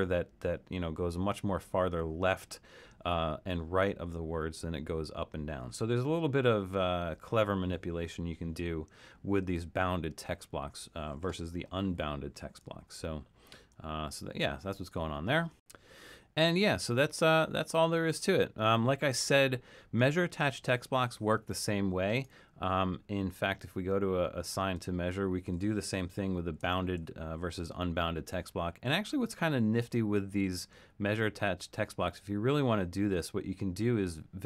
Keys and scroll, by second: 12.8 super+=, 13.6 super+-, 14.1 super+-, 16.1 super+-, 26.2 super+=.